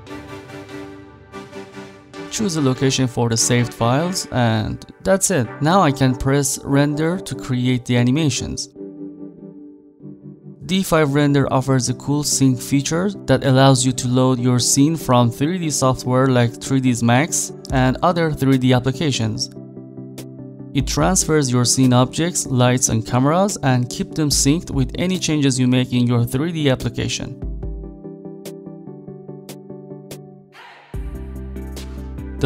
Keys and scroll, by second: 19.4 z.